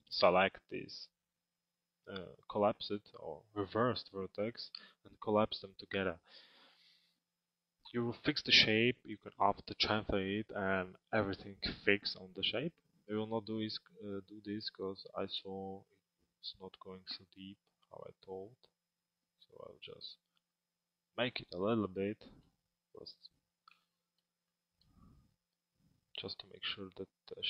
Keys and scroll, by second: 22.1 z.